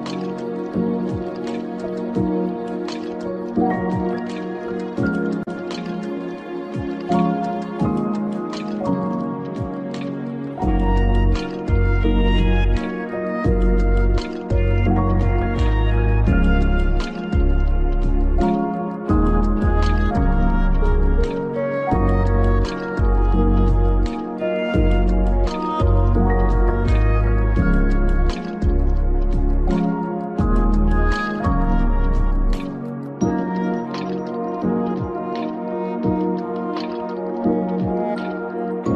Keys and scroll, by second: 34.5 ctrl+v.